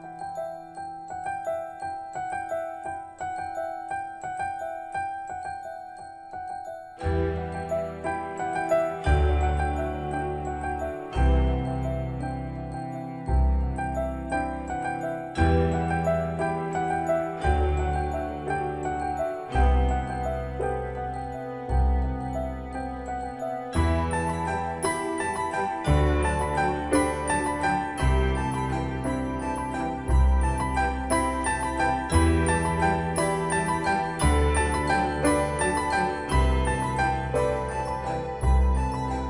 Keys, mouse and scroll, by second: 1.4-1.8 scroll down 1, 2.2-3.9 scroll up 1, 3.9-4.3 typing, 6.1 click, 10.2-11.1 typing, 12.8 click, 15.2 4, 15.8 Return, 16.8 Escape, 17.8-21.8 shift+middle drag, 22.9 click, 25.8-26.3 scroll down 1, 26.8-30.5 scroll up 1, 33.8-35.7 scroll down 1, 36.0-39.1 shift+middle drag.